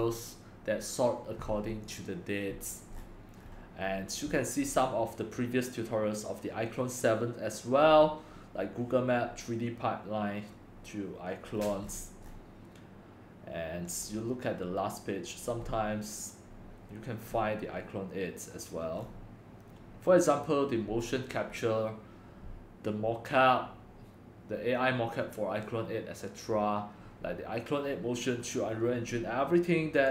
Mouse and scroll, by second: 0.0-2.0 middle drag, 2.0-3.0 drag, 3.0-8.2 middle drag, 3.0-4.6 scroll, 4.6 scroll, 7.8 scroll, 8.2-11.5 scroll up 3, 11.5 scroll up 1, 11.6-11.9 middle drag, 11.6 scroll, 11.9 scroll down 5, 12.0-14.0 middle drag, 12.0-14.0 scroll, 14.0-19.0 drag, 19.0-30.1 middle drag, 19.0-20.6 scroll.